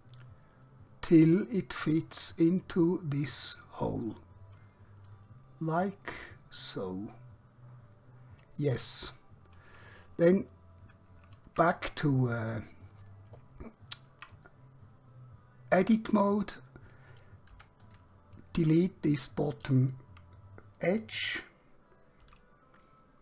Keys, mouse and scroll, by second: 3.3 click, 4.2 middle click, 11.6 Tab, 12.5-13.2 scroll up 1, 13.4 shift+middle click, 14.6 middle click, 17.6 3, 17.9 click, 22.4 x.